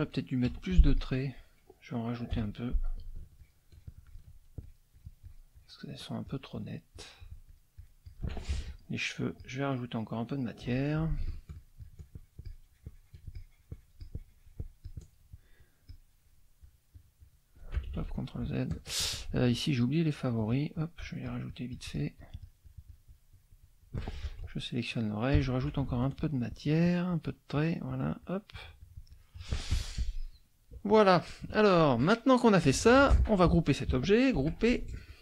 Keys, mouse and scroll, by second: 0.1 middle click, 0.5 F2, 0.9 click, 2.3 F6, 3.3 shift+click, 4.6-5.9 shift+drag, 6.2 shift+click, 6.9-8.3 shift+drag, 8.6 shift+F2, 8.7 shift+click, 9.3 click, 11.2 shift+F6, 11.3-15.3 shift+drag, 15.8 shift+click, 16.6 shift+click, 17.9 ctrl+shift+z, 18.7 shift+click, 19.5-24.1 shift+drag, 24.3 shift+F2, 24.4 shift+click, 25.4 F6, 25.9 shift+click, 27.1 shift+click, 27.6 shift+click, 29.7 shift+F1, 29.9 shift+middle click, 30.9 middle click, 31.4 KP_Subtract, 32.0 middle click, 32.6 click, 34.3 ctrl+g, 35.1 click.